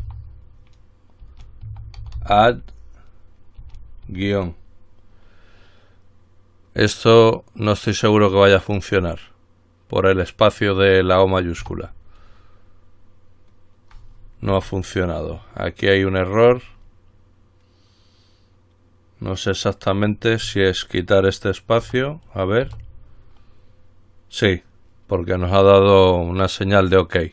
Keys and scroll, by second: 0.0 typing, 1.6-2.9 typing, 4.3 typing, 11.9 Return, 16.1-16.6 typing, 17.9 typing, 22.8 typing.